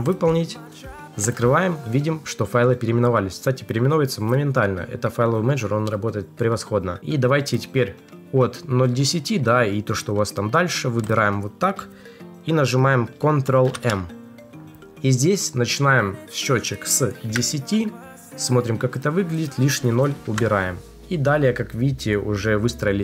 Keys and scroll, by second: 13.5 ctrl+m.